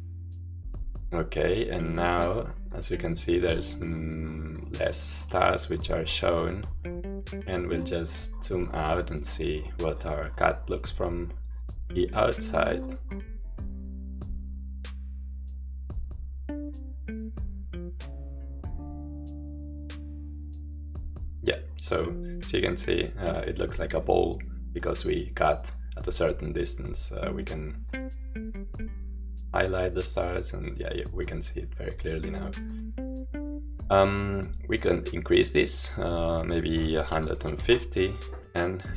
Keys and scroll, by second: 36.9-38.5 typing.